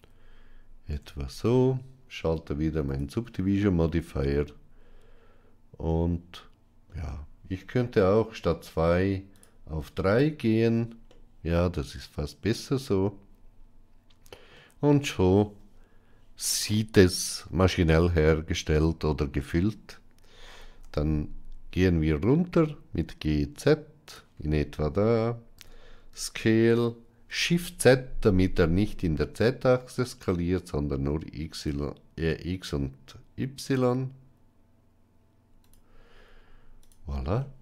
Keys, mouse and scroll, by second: 0.8 Tab, 2.7 click, 3.7-6.7 middle drag, 9.9 click, 10.9-14.4 middle drag, 17.0-17.6 middle drag, 20.4 g, 25.4 s, 37.2-37.6 middle drag.